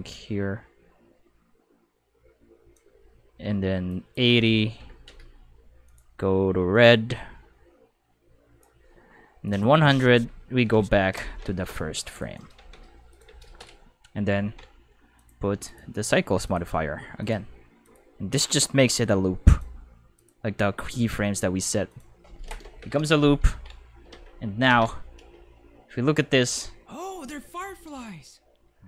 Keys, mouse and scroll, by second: 3.9 click, 5.9 click, 6.7-8.6 drag, 9.4 click, 11.3-12.2 middle drag, 12.2 right click, 12.3-13.9 typing, 13.1 click, 15.2 click, 15.7 click, 16.4 click, 17.2 click, 17.8 click, 18.4 click, 19.5 click, 20.2 click, 20.9 click, 21.9 click, 23.5 ctrl+Tab, 24.1 Escape, 24.2 5, 25.2 space.